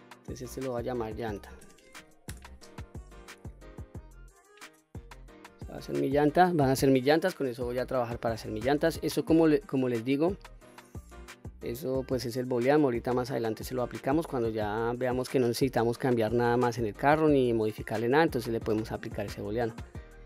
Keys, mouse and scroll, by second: 0.1 click, 0.2-3.4 drag, 1.2 l, 9.0 click, 12.1 click, 12.8-13.4 middle drag, 13.7-14.2 scroll up 1, 14.2 scroll down 1, 14.7-19.1 middle drag, 19.8 click.